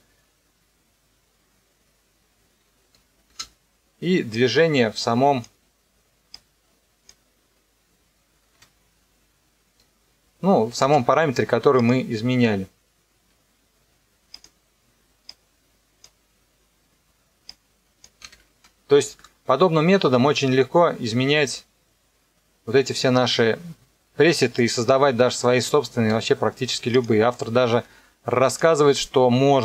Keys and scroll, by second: 3.3 space, 8.5 KP_0, 10.8 space, 18.2 n, 18.5 KP_0, 25.9 space.